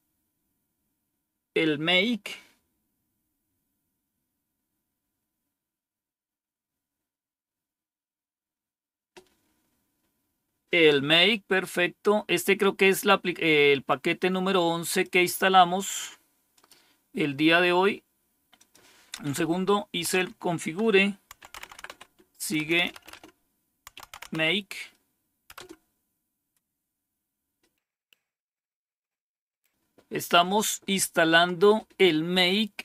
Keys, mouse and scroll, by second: 13.7-14.9 drag, 15.6 right click, 16.4 click, 17.0 click, 18.4 click, 19.4 Up, 20.0 End, 21.0-24.7 typing, 25.4 Return, 27.9-32.8 scroll down 1.